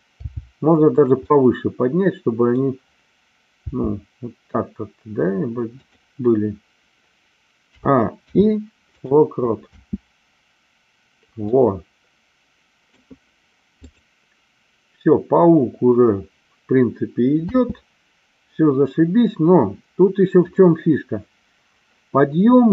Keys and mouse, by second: 0.2 g, 1.0 click, 1.2-2.6 middle drag, 3.6 g, 5.8 click, 7.6 a, 8.1 i, 9.7 space, 11.6-13.0 middle drag, 13.9 click, 17.5 space, 20.5 click.